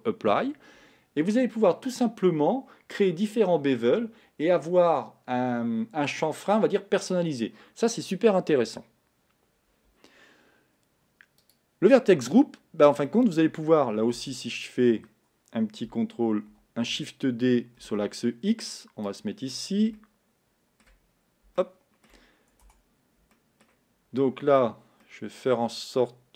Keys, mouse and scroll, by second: 11.9 click, 13.1-14.4 middle drag, 14.4 Tab, 14.6 scroll down 4, 16.6 shift+d, 20.0-21.1 shift+middle drag, 21.1-21.6 scroll up 3, 21.6-22.8 shift+middle drag, 22.8 Tab, 23.4-26.3 middle drag.